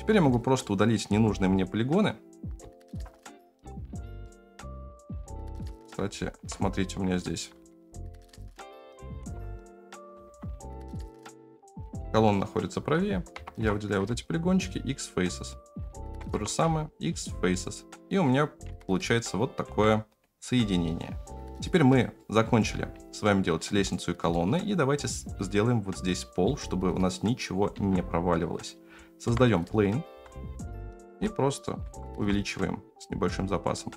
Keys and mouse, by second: 0.6 middle click, 1.1 3, 2.7 shift+click, 4.2 middle click, 5.6 click, 6.4 ctrl+KP_Add, 7.3 g, 9.2 ctrl+KP_Add, 10.0 g, 12.3 click, 13.3 ctrl+KP_Add, 13.6 ctrl+KP_Add, 14.0 x, 15.4 click, 16.2 ctrl+KP_Add, 16.3 ctrl+KP_Add, 16.6 x, 17.5 middle click, 18.6 Tab, 19.6 Tab, 20.9 middle click, 21.9-22.4 middle drag, 22.9-23.5 middle drag, 23.8-24.4 middle drag, 26.4-27.5 middle drag, 27.7 shift+a, 29.2 KP_7, 30.1 g, 31.0 s, 31.8 s.